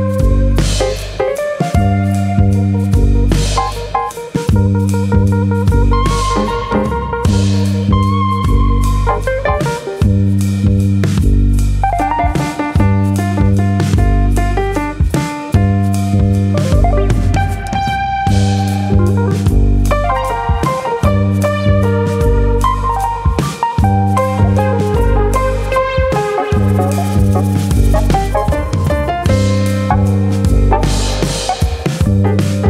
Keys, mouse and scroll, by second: 0.4 KP_3, 1.5 click, 3.2 click, 3.5 middle click, 4.1 middle click, 4.6 ctrl+click, 5.3 ctrl+click, 5.3 KP_3, 6.2 click, 7.5 middle click, 8.0 Tab, 8.0-8.6 scroll down 3, 8.3 middle click, 8.6-9.0 scroll up 2, 9.0 scroll down 1, 9.1 scroll down 1, 9.3 middle click, 10.4 shift+middle click, 10.7 middle click, 11.0-11.5 scroll up 2, 11.2 middle click, 11.5 middle click, 11.8 shift+middle click, 11.8 Tab, 12.1 middle click, 12.5 click, 12.7 middle click, 13.1 click, 14.0 middle click, 14.3 Tab, 14.5 middle click, 14.8 Tab, 15.1 middle click, 15.4 click, 15.7 middle click, 16.1 middle click, 16.5 middle click, 17.1-17.6 scroll up 2, 17.6 middle click, 18.5 middle click, 19.4 click, 20.2 ctrl+click, 20.5 middle click, 21.1 KP_3, 22.2 click, 24.5 middle click, 25.2 click, 25.7 ctrl+click, 26.6 KP_3, 27.5 click, 29.2 g, 31.8 click, 32.0 middle click.